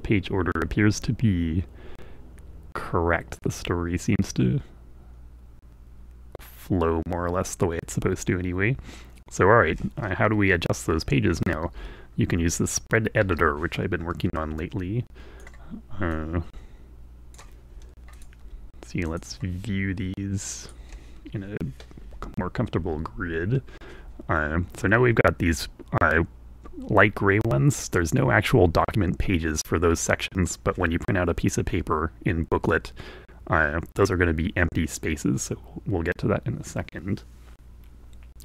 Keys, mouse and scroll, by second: 13.3 F3, 14.7-20.1 alt+drag, 20.8 click.